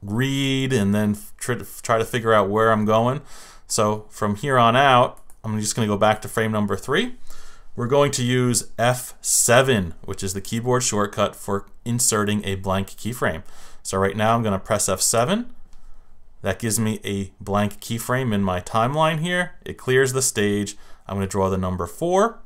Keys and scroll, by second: 15.1 F7.